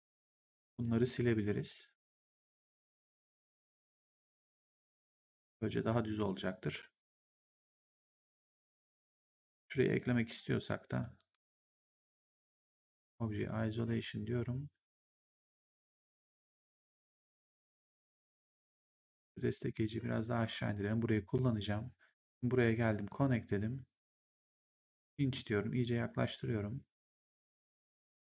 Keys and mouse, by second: 2.9 click, 3.7 right click, 4.4 3, 4.8 click, 6.5 ctrl+1, 9.8 click, 10.0 1, 12.3 click, 12.7 ctrl+1, 17.4 right click, 18.4 click, 19.1 w, 19.7 click, 21.9 click, 24.7 click, 25.2 middle click, 27.7 middle click.